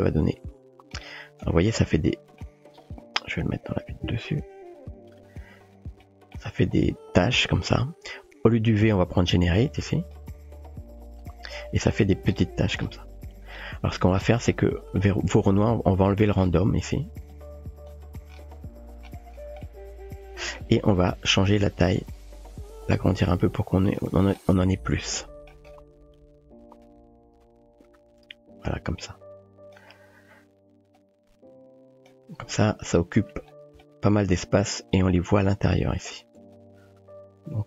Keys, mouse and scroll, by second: 1.9-2.5 middle drag, 3.6 KP_7, 6.2 shift+middle click, 9.3-10.4 drag, 11.7 typing, 14.5 middle click, 17.3-17.9 drag, 19.6-20.7 shift+middle drag, 21.8-24.0 drag, 25.2-25.5 shift+middle drag, 26.9-29.7 drag, 31.0-32.1 drag, 33.8-34.2 shift+middle drag, 36.6-37.6 drag.